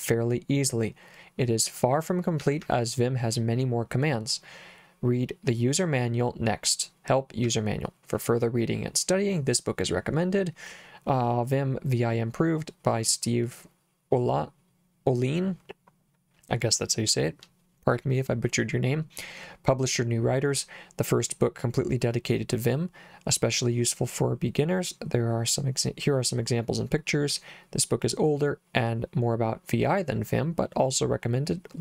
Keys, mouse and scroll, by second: 2.4 j, 2.6 j, 7.5 j.